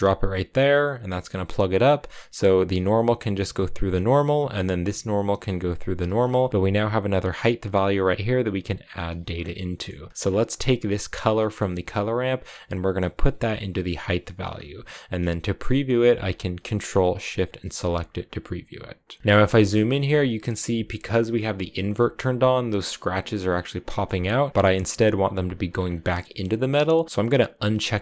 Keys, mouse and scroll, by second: 1.3-6.0 drag, 6.0-6.5 scroll up 3, 6.5-7.9 drag, 9.1-9.5 scroll down 5, 9.5 middle click, 10.0 click, 10.1-11.0 scroll up 4, 11.2-12.2 middle drag, 12.2-15.2 drag, 17.2 ctrl+shift+click, 17.6-19.2 drag, 19.2-19.9 scroll up 11, 19.3 shift+middle click, 19.9-24.5 shift+middle drag, 25.5-26.0 scroll up 5.